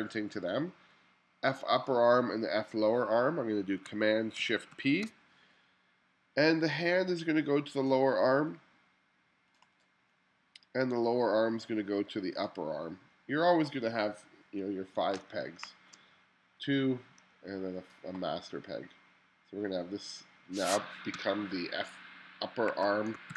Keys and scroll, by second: 15.5 space, 21.2 BackSpace, 22.7-23.3 typing.